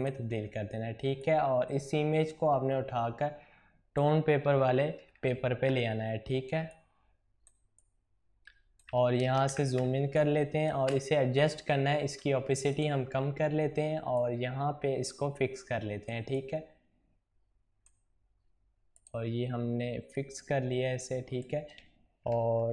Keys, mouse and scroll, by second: 0.0-6.6 drag, 6.6-9.7 drag, 9.7 space, 10.0 click, 10.2 space, 12.0-22.7 drag.